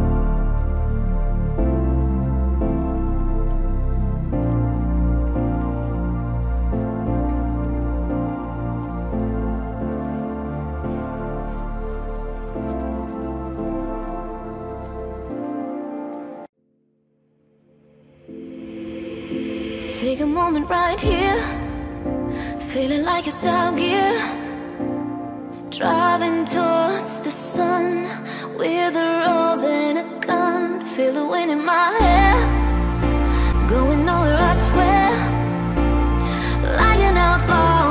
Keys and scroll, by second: 3.5 ctrl+t, 6.1 Return, 18.2 ctrl+t, 24.2 Return, 25.9 ctrl+].